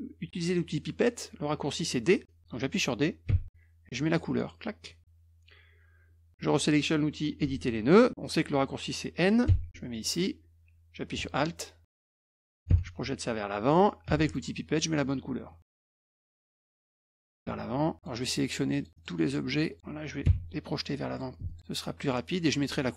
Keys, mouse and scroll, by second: 3.2 d, 4.1 click, 9.9 click, 11.3 alt+click, 11.9 alt+click, 14.0 d, 14.3 click, 15.9 click, 18.0 alt+click, 18.2 alt+click, 18.7 alt+click, 18.9 alt+click, 19.7 alt+click, 21.1 click, 21.5 alt+click, 22.0 alt+click.